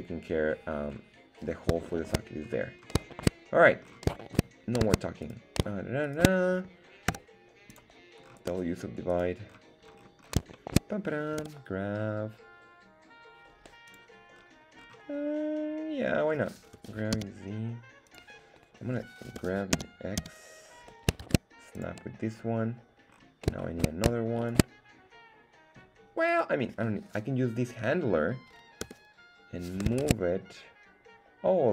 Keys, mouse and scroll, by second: 0.9-1.7 scroll up 4, 1.9 shift+middle click, 2.5-3.0 scroll up 3, 3.5 shift+middle click, 3.7-4.4 scroll down 3, 4.5 shift+middle click, 5.4 right click, 6.3 shift+right click, 7.1 w, 8.2 scroll up 1, 9.1 right click, 9.1-10.0 scroll up 4, 10.0-10.3 scroll down 2, 10.5 shift+middle click, 11.4 g, 13.9 click, 14.3-15.4 scroll up 4, 16.8 g, 17.2 z, 18.1 click, 19.4 g, 19.8 z, 20.3 x, 21.2 shift+Tab, 21.8 click, 22.4 scroll down 1, 23.2 scroll down 2, 23.6 shift+middle click, 24.5 shift+right click, 26.3 right click, 28.8 g, 30.0 shift+Tab.